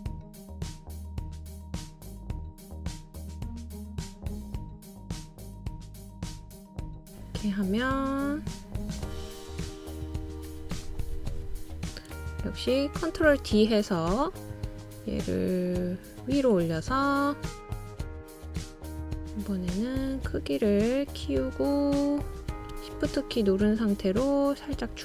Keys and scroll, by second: 4.0-4.9 typing, 7.6-8.3 typing, 14.5 super+o.